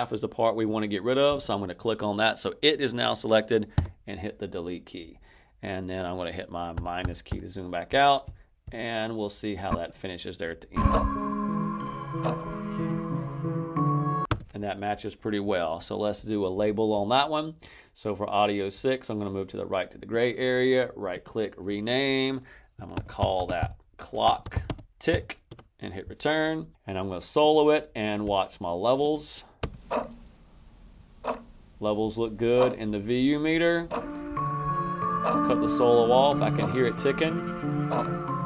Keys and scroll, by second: 3.6 BackSpace, 6.6 -, 10.6 space, 14.1 space, 22.6-25.5 typing, 29.5 space.